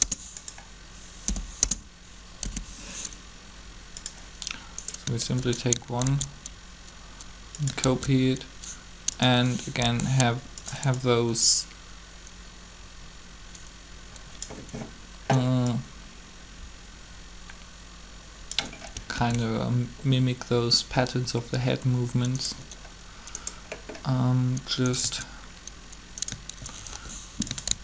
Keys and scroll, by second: 1.2 0, 1.6 Return, 2.3 i, 6.0 shift+d, 7.8 shift+d, 9.8 g, 19.1 alt+a, 26.9 shift+g, 27.7 shift+d.